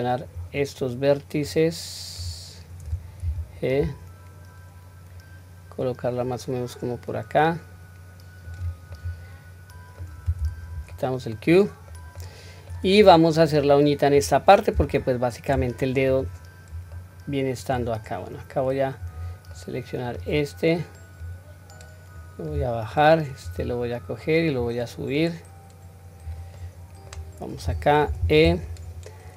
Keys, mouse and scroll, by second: 0.4-2.2 drag, 3.2 g, 8.9-10.1 middle drag, 10.4 q, 10.9-12.0 middle drag, 12.1-12.7 middle drag, 13.0-13.4 scroll up 1, 13.6-14.1 middle drag, 13.6 scroll up 1, 14.9-15.5 shift+middle drag, 16.1 click, 16.9-17.7 middle drag, 18.0 scroll down 1, 19.0 click, 19.5-20.1 middle drag, 21.2-22.6 drag, 23.4 click, 24.6-26.3 drag, 26.6-27.1 middle drag, 28.0 3, 28.7 click.